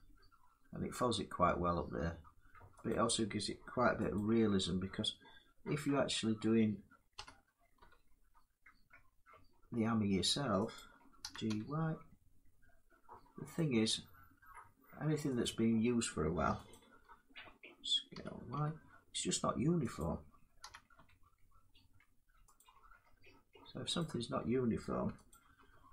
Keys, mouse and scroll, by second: 3.8 alt+click, 6.8 s, 7.4 y, 10.4 click, 10.9 g, 13.2 click, 15.1 click, 16.4 alt+click, 17.8 s, 18.2 y, 19.6 click, 20.3 g, 22.2 click, 24.6 click, 25.0 alt+click.